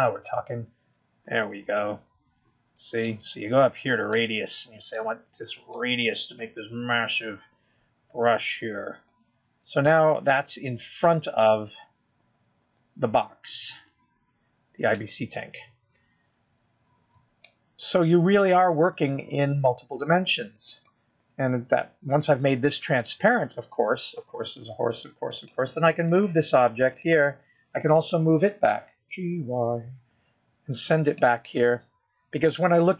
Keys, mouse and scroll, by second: 0.8 click, 2.7 click, 6.5 click, 8.1 click, 19.2-19.8 scroll down 1, 19.8 middle click, 19.8 scroll down 1, 27.8 click, 29.3 click, 31.3 g.